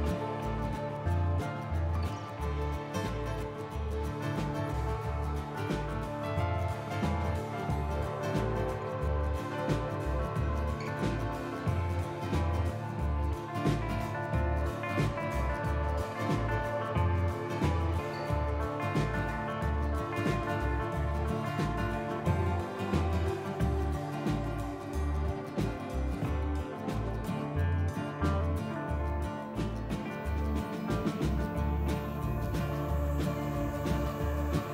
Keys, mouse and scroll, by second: 0.9 click, 1.6 g, 2.6 click, 2.8 g, 4.1 click, 4.4 g, 5.8 click, 6.0 g, 7.6 click, 8.0 g, 10.5 click, 10.8 g, 12.3 click, 12.7 g, 14.3 click, 14.6 g, 16.3 click, 16.5 g, 18.0 click, 18.3 g, 19.4 click, 19.7 g, 21.3 scroll down 2, 23.0 scroll up 1, 23.6 g, 26.5 g, 28.1 click, 28.7 g, 29.5 click, 30.3 g, 30.7 click, 30.9 g, 32.1 click, 32.3 g, 33.5 click, 33.8 g.